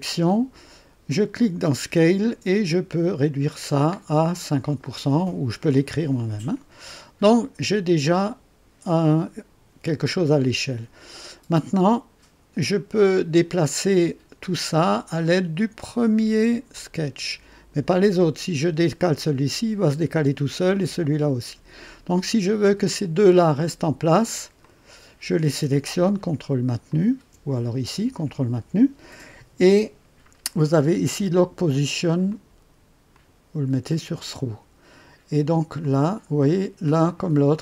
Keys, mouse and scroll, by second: 1.3 click, 2.3-3.1 scroll down 2, 4.2 scroll down 2, 12.9 click, 16.7-17.9 drag, 24.6 click, 26.8 ctrl+click, 32.2 click, 33.1 click, 33.9 click, 35.8 click, 37.0 click.